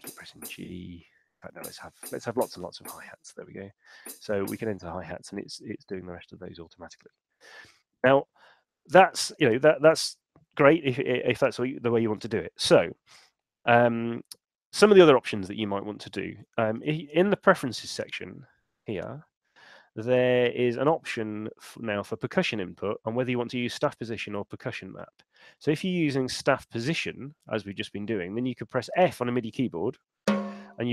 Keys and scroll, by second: 16.9 super+,.